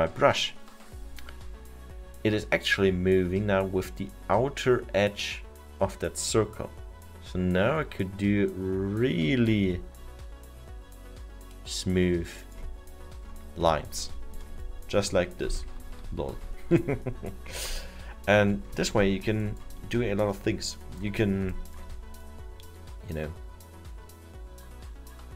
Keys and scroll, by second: 16.3 ctrl+z.